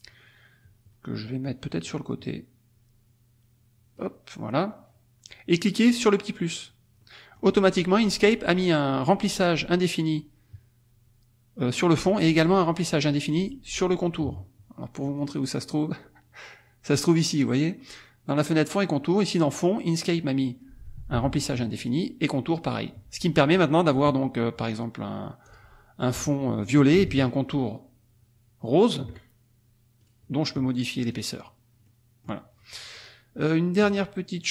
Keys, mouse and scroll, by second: 1.4-4.2 drag, 5.9 click, 7.0 click, 15.1 click, 19.1 click, 21.8 click, 25.5 click, 27.2 shift+click, 30.0 right click, 31.1 click, 31.9 click, 33.0 click.